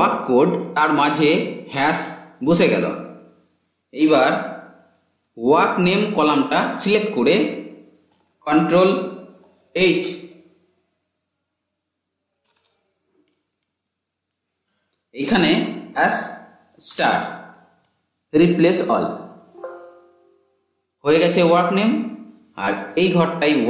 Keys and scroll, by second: 8.9 ctrl+h.